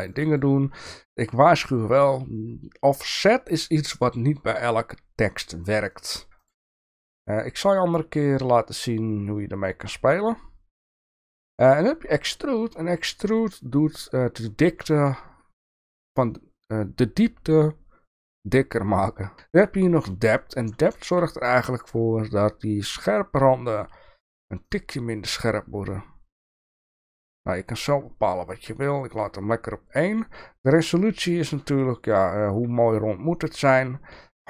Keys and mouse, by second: 0.0 click, 5.8 click, 5.9 click, 6.1 click, 6.4 click, 6.6 click, 12.3 click, 13.2 click, 13.3 click, 20.9 shift+middle drag, 26.9 click, 29.1 click.